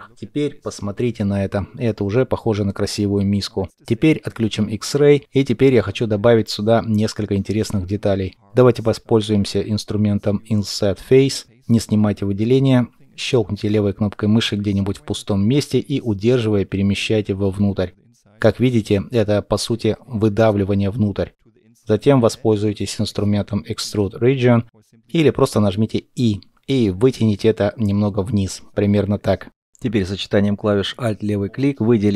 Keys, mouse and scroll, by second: 5.3 middle click, 6.1 scroll up 1, 7.7-8.8 scroll down 1, 8.8 middle click, 24.5 middle click, 28.6 scroll down 1, 29.0 middle click.